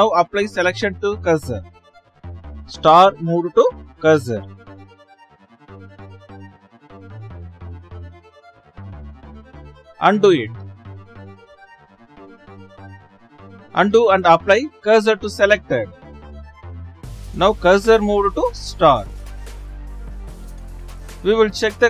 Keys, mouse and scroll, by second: 6.7-9.2 middle drag, 9.2 ctrl+z, 19.3 shift+s, 21.5 shift+s.